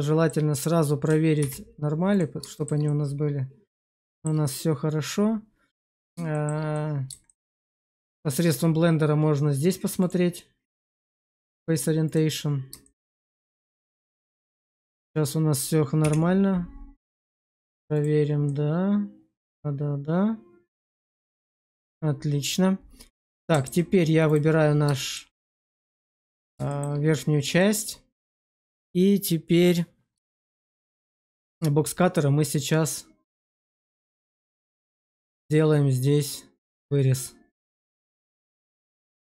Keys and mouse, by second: 1.3 alt+v, 2.4 shift+middle click, 2.8-3.8 middle drag, 4.0 shift+middle click, 4.3-6.0 middle drag, 6.2 shift+middle click, 6.6 middle click, 7.2 shift+middle click, 9.9-12.2 drag, 12.8 shift+middle click, 13.1-14.5 middle drag, 14.7 shift+middle click, 15.9 /, 17.1 middle click, 18.3-21.4 middle drag, 23.2 middle click, 24.9 shift+middle click, 25.8 shift+middle click, 26.6 shift+middle click, 27.5 shift+middle click, 30.2-31.3 shift+middle drag, 33.4 shift+middle click, 34.3 shift+middle click.